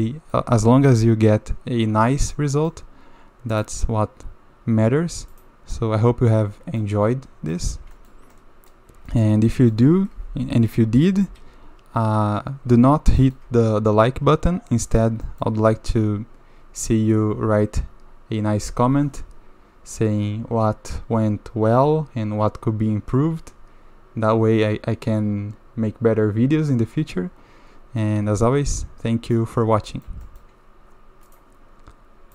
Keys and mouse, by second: 0.0 click, 2.3-2.7 drag, 5.3 click, 5.8 drag, 6.0 middle drag, 6.8-7.5 middle drag, 7.9 shift+middle drag, 8.4 middle click, 9.1 shift+middle drag, 9.5 middle click, 11.3 KP_7, 13.2 shift+middle click, 14.0-15.0 middle drag, 15.2 shift+middle drag, 28.0-29.4 middle drag, 29.9 shift+middle drag, 30.2 middle drag.